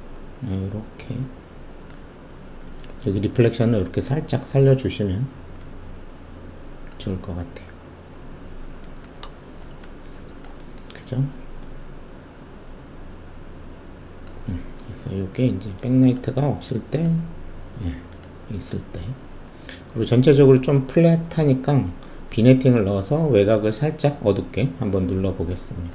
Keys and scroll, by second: 9.4 alt+shift+q.